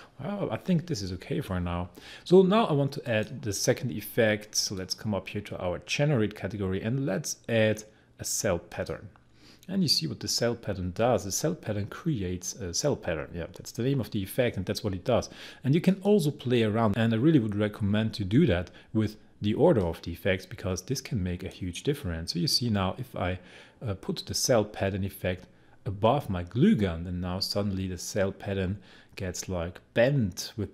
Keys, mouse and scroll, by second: 3.1 click, 8.7 click, 15.8 click, 19.8 click, 19.8-24.0 drag.